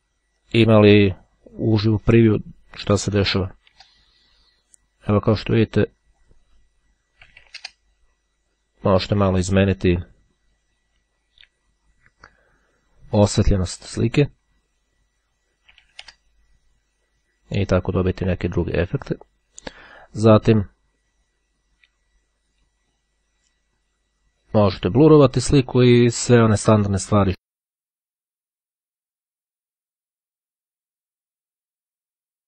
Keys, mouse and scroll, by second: 0.5-1.9 drag, 3.1 2, 3.2 KP_0, 3.4 KP_Enter, 6.1 click, 7.4 7, 7.5 KP_5, 7.7 KP_Enter, 9.3 click, 15.9 KP_3, 16.0 KP_5, 16.2 KP_Enter, 18.4 click, 20.5 click, 25.3 click, 27.4 click, 28.6-31.3 drag, 31.8-32.4 drag.